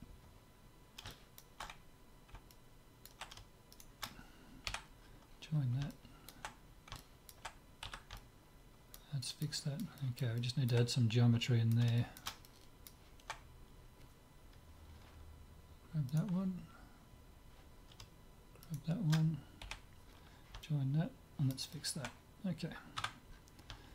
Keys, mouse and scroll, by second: 0.5 click, 1.2-4.2 middle drag, 3.7-5.3 right drag, 4.7 j, 5.3 middle click, 7.8 z, 8.7-14.2 middle drag, 16.1-17.8 right drag, 16.9-18.0 middle drag, 18.6-20.4 right drag, 19.6 j, 20.4-22.9 middle drag, 22.9 Tab, 23.1-23.9 middle drag.